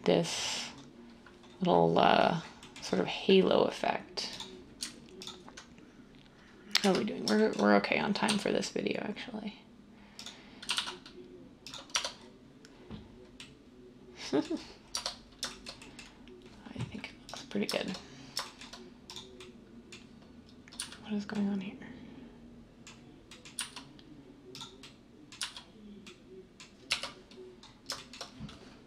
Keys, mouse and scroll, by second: 6.8 1, 8.2 s, 10.6 typing, 11.9 Tab, 14.9 Tab, 20.7 z, 23.5 z, 25.4 z, 26.9 1.